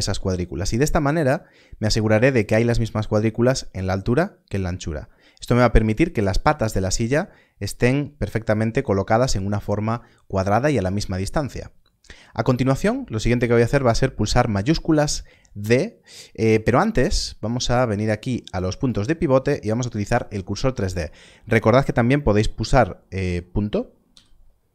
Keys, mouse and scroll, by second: 2.3 ctrl+click, 18.5 click, 24.0 click.